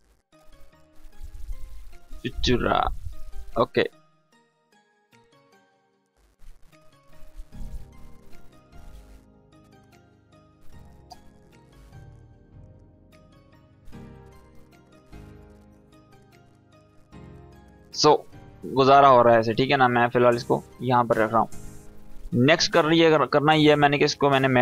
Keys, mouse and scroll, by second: 0.8-2.0 typing, 2.5 Tab, 4.1 click, 4.5-6.8 scroll up 1, 6.9 click, 8.5 Down, 9.5 Up, 11.8-13.0 drag, 22.7 click.